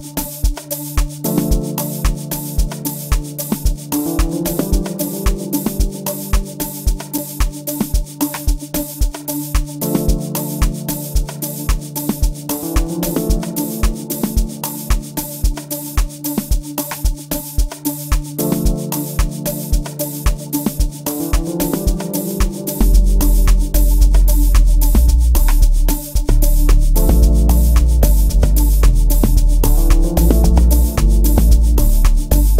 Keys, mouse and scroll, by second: 4.4 F1, 10.1-12.8 drag, 18.6-22.6 drag, 31.6 click.